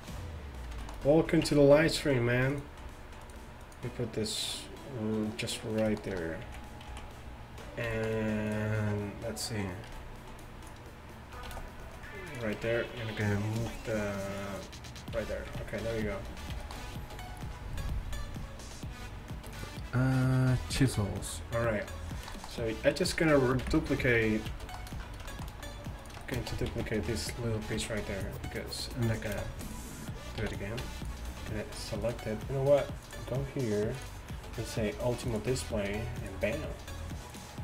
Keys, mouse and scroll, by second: 1.0 click, 1.5 Tab, 2.6-4.7 drag, 4.7 right click, 6.0 right click, 6.5 z, 8.5-10.1 right drag, 10.0 b, 11.5 shift+s, 12.6 Tab, 13.6 ctrl+alt+shift+c, 15.5 z, 16.0 a, 23.7 KP_1, 26.1-26.6 drag, 26.6 Tab, 26.8 z, 27.8 b, 29.4 shift+d, 30.5 p, 30.9 Tab, 31.1-37.6 right drag, 33.1-34.0 drag, 36.3-37.6 drag.